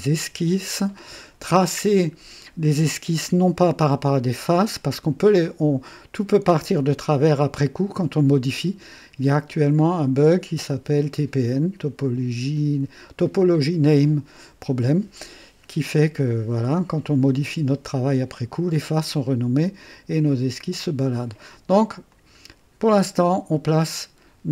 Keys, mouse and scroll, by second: 4.5 click, 22.0 click.